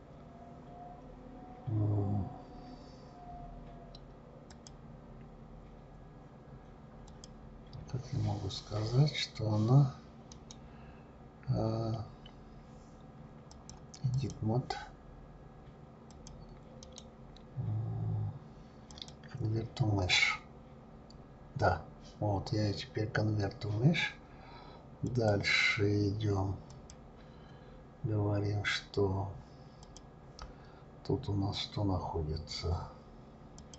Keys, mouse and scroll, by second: 4.5 click, 10.3 right click, 12.7-13.3 right drag, 13.5-16.2 drag, 16.8-19.8 right drag, 25.1 click, 26.7 click, 29.8 click, 33.6 click.